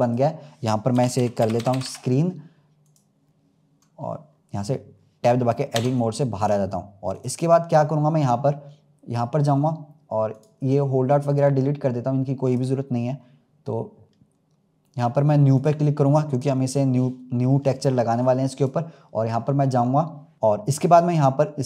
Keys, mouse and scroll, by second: 1.6 e, 5.6 Tab, 6.3 click, 7.0 click, 10.2 click, 11.2-20.3 drag.